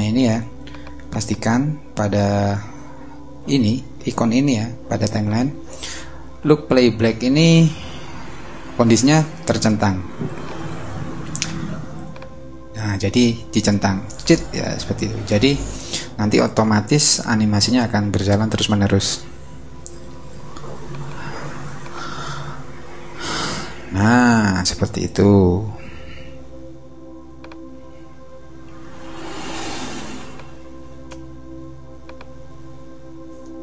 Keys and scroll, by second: 28.7 super+=, 29.9 super+space, 30.6 space.